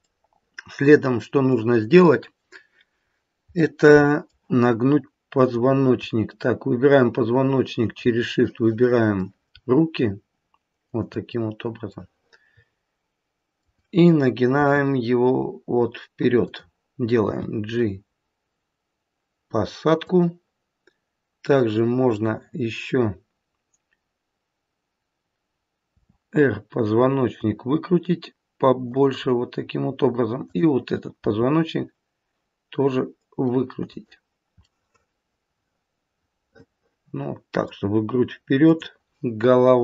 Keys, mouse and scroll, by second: 0.0 middle click, 0.2 middle click, 0.6 middle click, 1.0 middle click, 3.5 middle click, 3.7 middle click, 5.3 click, 7.5 shift+click, 8.3 middle click, 10.8 shift+click, 11.8 middle click, 14.5 r, 17.2 g, 22.0 click, 25.8 r, 30.3 click, 31.2 r, 34.6 middle click, 38.5 click.